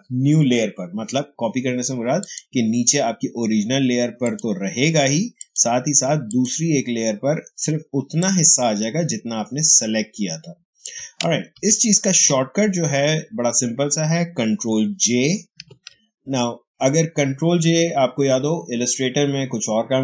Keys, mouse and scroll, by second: 2.1 click, 7.9 space, 8.1 click, 8.4 space, 11.5 ctrl+z, 14.5 ctrl+z, 15.5 ctrl+j.